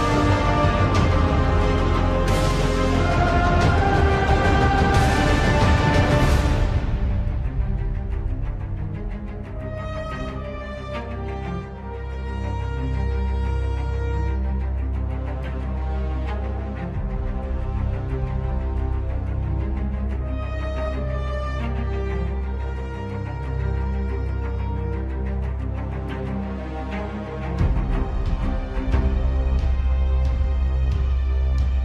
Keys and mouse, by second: 0.4-1.8 middle drag, 2.4 KP_7, 3.7 a, 4.3 r, 7.8 shift+middle click, 9.0 z, 10.2 3, 10.9-12.2 drag, 13.2 x, 16.6 click, 18.3 x, 20.1-21.6 drag, 22.5 click, 24.5 z, 27.6 shift+middle click, 29.2 ctrl+r.